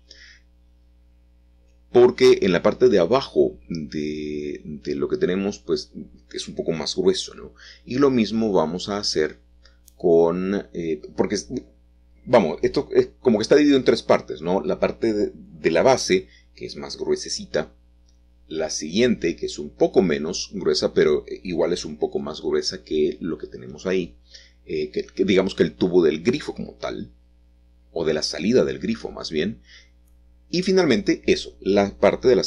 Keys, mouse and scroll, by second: 0.0-0.3 typing, 5.4 middle click, 5.5 click, 7.0 click, 8.1 space, 8.2-9.2 drag, 11.1 typing, 17.1 alt+shift+click, 18.4 alt+shift+click, 19.4 alt+shift+click, 21.5 alt+shift+click, 24.7 s, 27.5 shift+z, 31.6 click.